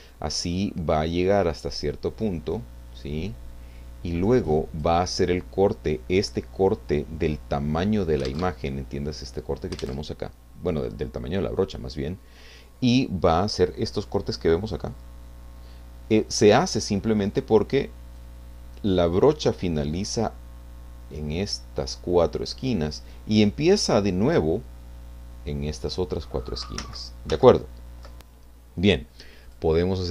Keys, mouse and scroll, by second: 0.3-0.7 scroll up 2, 1.1-5.0 drag, 8.3 alt+Tab, 9.8 alt+Tab, 16.5-18.4 drag, 26.8 ctrl+z, 29.4 click.